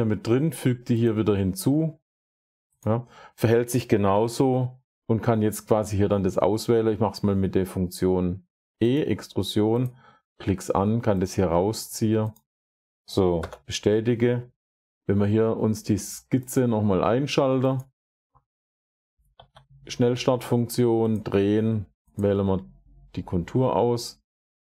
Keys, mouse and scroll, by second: 1.0 click, 2.7 click, 4.0 typing, 5.7 typing, 8.8 click, 9.7 click, 11.7 click, 12.2 click, 13.3 Return, 16.4 click, 17.7 click, 19.2 s, 20.6 click, 22.0 click.